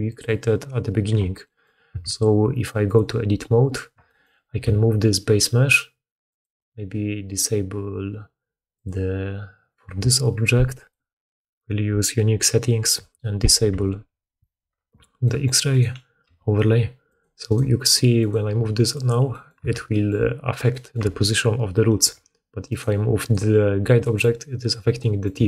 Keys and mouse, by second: 1.8 Tab, 2.7 middle click, 2.9 click, 2.9-4.0 middle drag, 4.5 g, 8.7-14.7 drag, 15.6 click, 15.6 middle click, 15.6 right click, 16.1 g, 17.2 middle click, 17.4 click, 17.5 middle click, 18.3-19.5 middle drag, 18.3 g, 19.5 Tab, 21.0 Tab, 22.0 Tab, 22.6 click, 23.1 click, 25.0 middle click, 25.1 click, 25.3 Tab, 25.3 middle click.